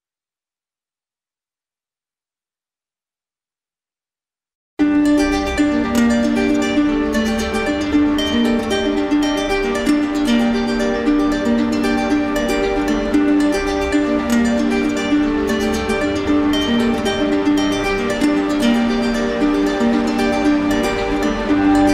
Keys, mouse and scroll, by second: 1.2 click, 2.2 click.